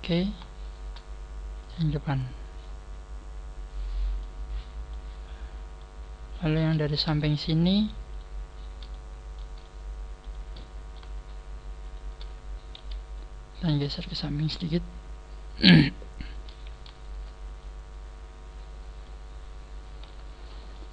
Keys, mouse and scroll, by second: 0.2 right click, 0.6 shift+right click, 1.6 click, 3.2 scroll up 2, 3.6 scroll down 1, 4.2 middle click, 5.0 scroll up 1, 5.7 middle click, 6.9 right click, 7.7 shift+right click, 8.8 shift+right click, 8.8 middle click, 10.0 middle click, 10.5 middle click, 11.1 shift+right click, 12.1 shift+right click, 12.7 KP_1, 13.1 scroll down 1, 13.8 click, 16.2 right click, 16.9 shift+right click, 17.6 click, 19.3-20.0 scroll down 7, 20.0 Tab, 20.7 middle click.